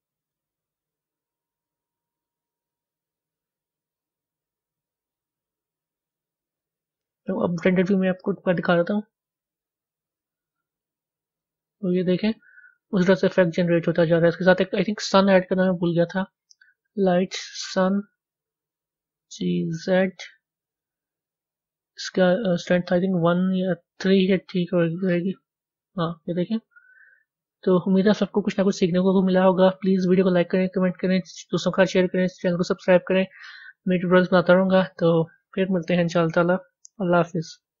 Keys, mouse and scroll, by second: 9.2 z, 11.4 scroll up 2, 12.4-17.7 middle drag, 14.1-17.7 scroll down 2, 17.7 shift+a, 21.4 click, 25.0-26.1 drag, 26.1 middle click, 27.0 scroll up 3, 27.8 middle click, 28.6-30.5 middle drag, 32.2-34.0 middle drag, 34.0-35.9 scroll down 1, 35.9-37.8 scroll down 1.